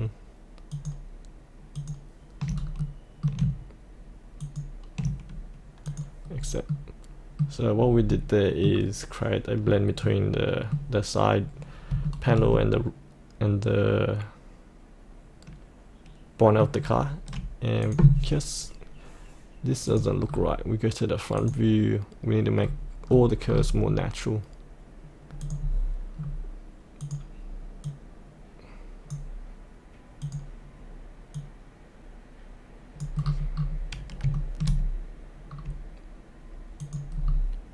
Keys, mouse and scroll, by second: 0.7 ctrl+click, 1.8 ctrl+click, 2.6 scroll up 1, 2.8 middle click, 4.4 ctrl+click, 5.8 click, 6.1 click, 6.4-6.7 scroll up 1, 6.7 middle click, 7.7-8.1 scroll down 1, 8.1-9.1 middle drag, 9.6-10.0 scroll up 1, 10.0 middle click, 11.4-11.9 scroll down 1, 12.0-14.2 shift+middle drag, 14.2-16.7 middle drag, 16.7 scroll down 1, 17.8 click, 20.3-21.4 scroll down 1, 21.4 click, 22.6-23.5 scroll down 1, 25.4 click, 26.2-27.0 scroll down 1, 27.0-33.2 drag, 33.2-33.5 scroll up 1, 34.3 shift+middle click, 35.4 scroll down 1, 36.8 click, 37.1-37.7 scroll down 1.